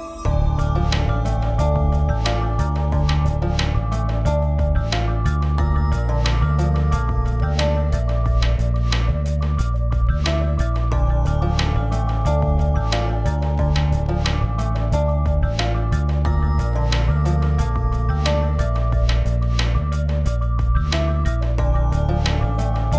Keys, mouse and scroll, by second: 0.1 Down, 1.1 click, 2.3 shift+m, 2.9 click, 3.5 v, 3.9-4.5 drag, 14.3 alt+scroll down 1, 15.2-15.6 drag, 17.3-18.8 drag, 20.3-21.2 shift+drag.